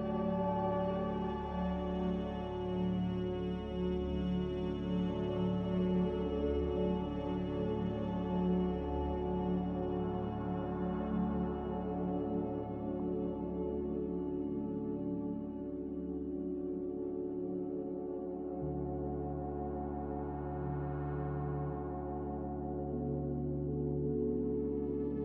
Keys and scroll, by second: 0.1 z, 21.8 typing, 23.7-25.1 typing.